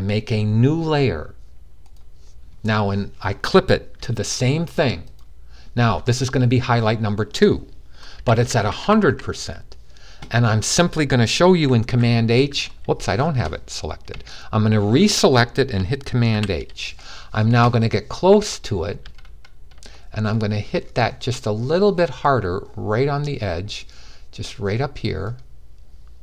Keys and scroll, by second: 7.9-8.8 typing, 11.7 super+h, 16.0 super+h, 21.6-21.9 typing.